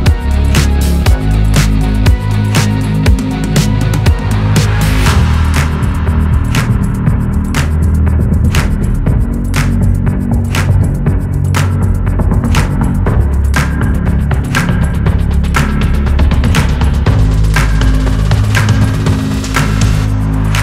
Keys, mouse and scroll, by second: 0.5 click, 1.5 shift+d, 2.0 click, 4.3 middle click, 5.3 KP_7, 5.4 scroll up 1, 5.7 click, 6.1 click, 6.6 click, 7.9 middle click, 8.5 scroll down 3, 8.8 click, 8.9 scroll up 4, 9.2 middle click, 10.0 scroll down 1, 10.6-11.1 scroll down 3, 11.1 shift+a, 11.3 scroll down 1, 11.5-12.5 middle drag, 12.5 click, 12.8 scroll up 2, 13.0 click, 13.8 click, 14.0-15.2 middle drag, 15.2-15.7 scroll down 2, 16.0-16.6 scroll down 1, 19.0-20.6 drag.